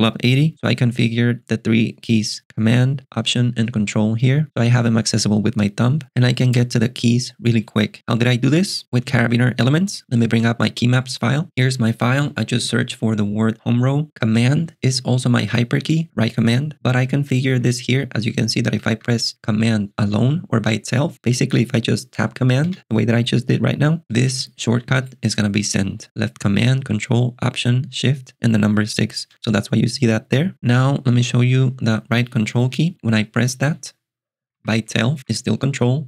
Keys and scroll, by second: 16.7-19.0 typing, 22.7 ctrl+alt+shift+super+6, 24.0 ctrl+alt+shift+super+6, 26.0 j, 29.3 ctrl+alt+shift+super+6, 34.1 j.